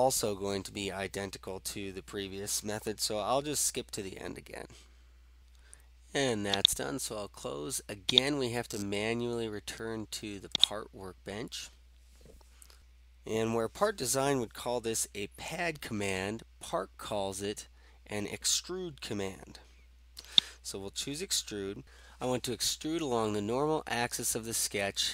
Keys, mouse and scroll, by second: 4.8 scroll down 1, 5.1-5.4 scroll up 2, 6.7 click, 8.2-11.8 drag, 20.4-21.6 drag.